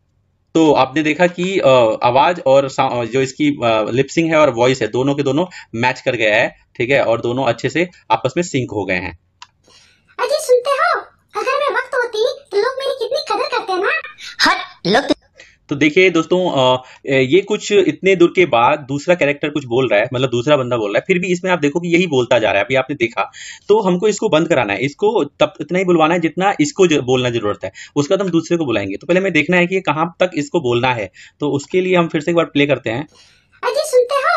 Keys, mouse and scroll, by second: 5.3-7.8 middle drag, 9.5 click, 15.0-31.2 drag, 31.6-34.3 drag.